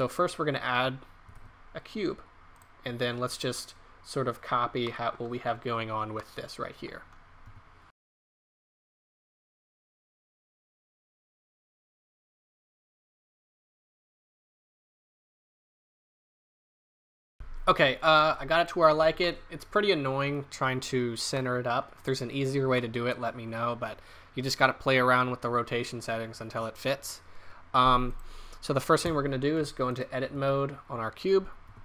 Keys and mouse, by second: 1.3 shift+a, 4.8-6.1 middle drag, 7.4-8.8 typing, 10.8 right drag, 11.2 click, 11.9 middle click, 13.6 s, 14.8-16.3 typing, 15.2 click, 15.8-16.1 drag, 19.3-21.6 middle drag, 22.1-24.8 middle drag, 28.4 right click, 29.1 Tab, 29.7 Tab, 30.4 Tab, 31.7 w.